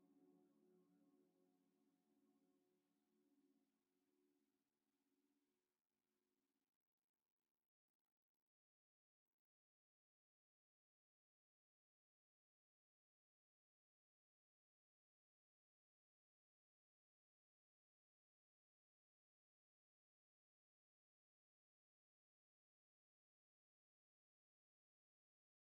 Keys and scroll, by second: 8.3 z, 9.9-10.7 typing, 17.2-18.1 typing, 22.4-23.3 typing, 23.5 Return.